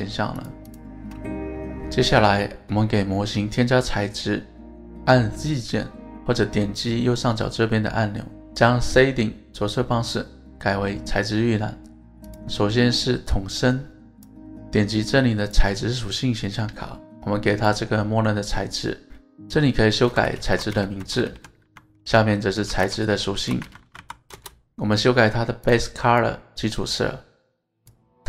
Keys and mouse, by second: 1.3-2.5 middle drag, 3.0-4.9 middle drag, 11.2 click, 12.6-13.0 middle drag, 13.5 middle drag, 14.2-17.7 drag, 19.1-25.1 drag.